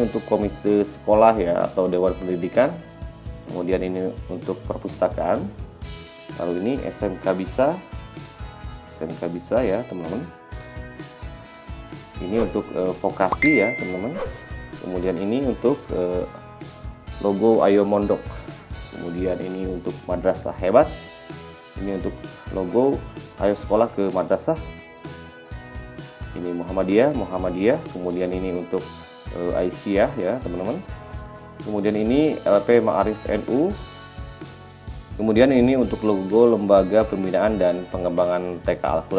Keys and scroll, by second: 26.1 b.